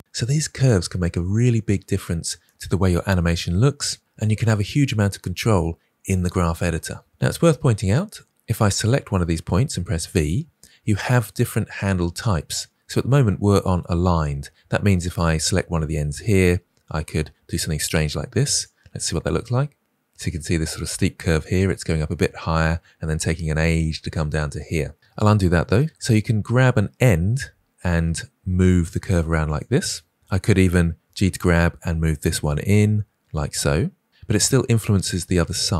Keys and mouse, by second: 8.8-9.2 drag, 9.9 v, 15.0 click, 16.4 g, 18.9 space, 20.1 space, 25.0 ctrl+z, 27.3 g, 31.0 g.